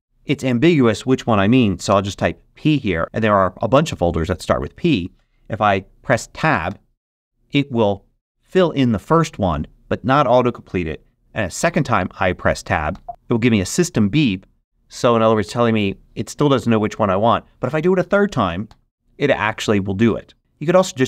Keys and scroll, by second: 0.6 BackSpace, 1.8 p, 6.6 Tab, 12.9 Tab, 18.6 Tab.